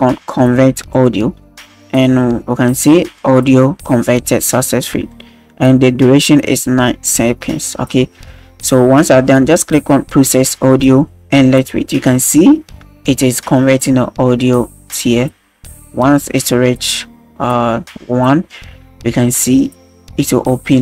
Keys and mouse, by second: 0.9 click, 10.3 click.